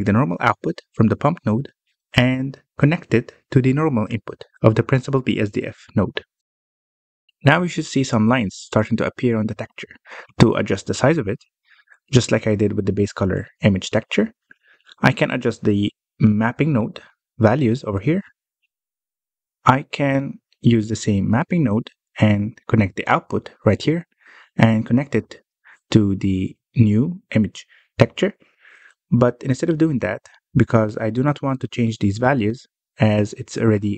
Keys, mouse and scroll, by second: 0.7-3.7 drag, 6.5-7.6 scroll up 3, 7.6-8.1 scroll up 1, 8.1-11.8 middle drag, 11.8-12.3 scroll up 1, 12.3 scroll up 1, 12.5 middle click, 13.0 scroll down 3, 13.1 middle click, 13.5-14.0 scroll down 4, 14.0 middle click, 14.5-15.2 scroll up 4, 15.2 middle click, 15.5 scroll down 1, 15.7 middle click, 16.0 scroll down 1, 16.2-17.6 scroll up 7, 16.4 middle click, 17.6 middle click, 18.0-19.0 scroll down 1, 19.0 click, 23.0 click, 31.0 middle click, 31.4 scroll up 3, 33.2-33.5 scroll up 1, 33.5 middle click.